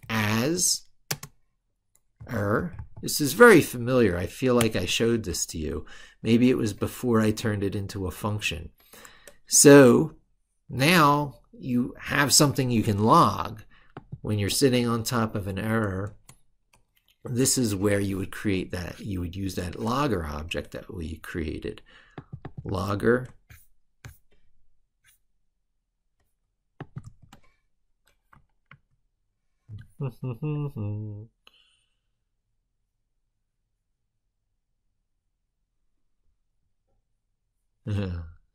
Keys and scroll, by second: 22.7 ctrl+c, 26.8 ctrl+v, 28.6 ctrl+super+Left.